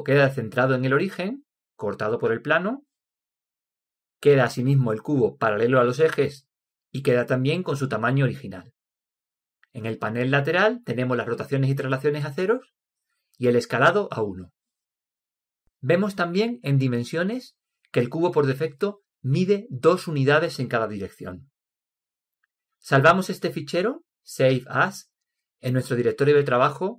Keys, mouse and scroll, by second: 2.6-4.6 middle drag, 8.6-10.0 scroll up 1, 10.0 scroll up 1, 10.2 middle click.